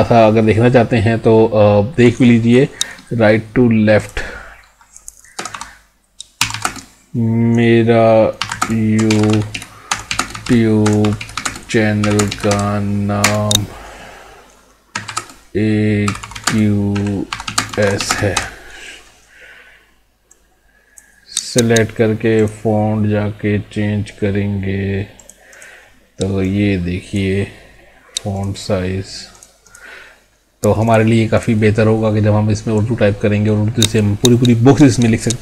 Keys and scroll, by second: 6.7 space, 8.6 space, 10.3 space, 12.2 space, 13.3 space, 15.2 space, 16.4 space, 17.5 space, 18.1 space.